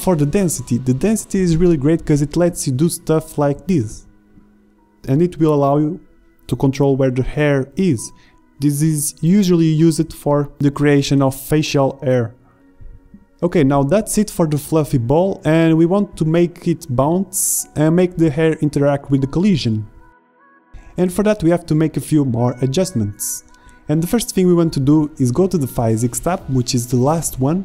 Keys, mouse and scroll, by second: 7.2-7.9 drag, 7.9-8.8 middle drag, 8.4 click, 8.6 click, 10.2 middle drag, 11.0-11.4 middle drag, 11.7-12.4 middle drag, 13.0 shift+z, 16.6-21.8 drag, 22.4-27.6 middle drag.